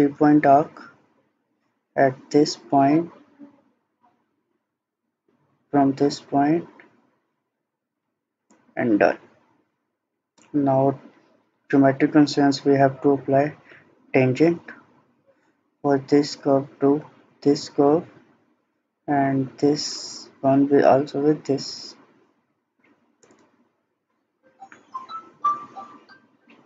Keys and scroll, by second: 9.4 Escape.